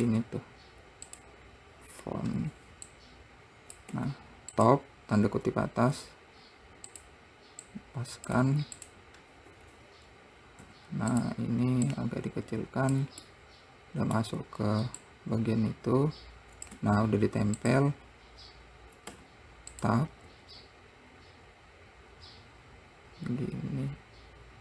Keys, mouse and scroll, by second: 3.3 click, 4.3 `, 6.4 r, 8.1 click, 8.7 `, 10.0-11.1 scroll up 1, 11.1 s, 12.3 click, 13.7-15.5 middle drag, 15.5 click, 20.7 r.